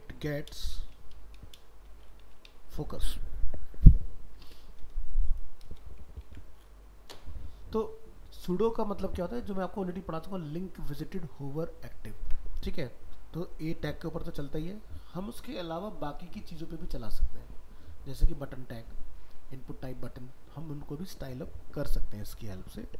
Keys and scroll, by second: 6.2 ctrl+s.